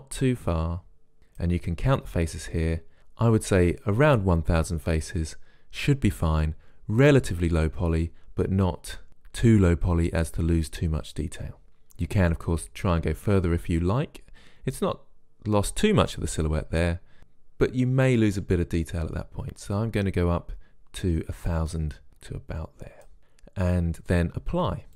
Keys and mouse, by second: 12.4-14.4 drag.